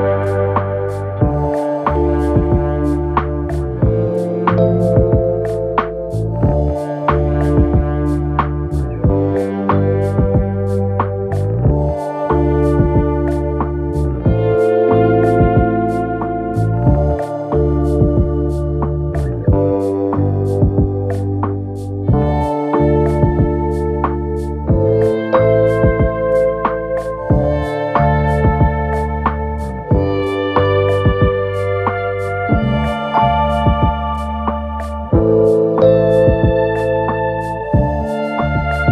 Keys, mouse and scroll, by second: 1.2-38.9 drag.